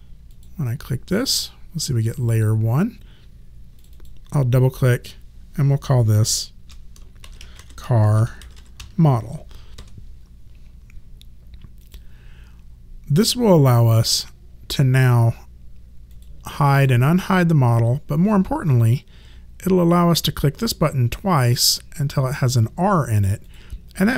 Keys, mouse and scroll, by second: 0.3 click, 3.8 click, 5.9 BackSpace, 7.0-9.4 typing, 9.8 Return, 11.8 click, 16.1 click, 20.7 click.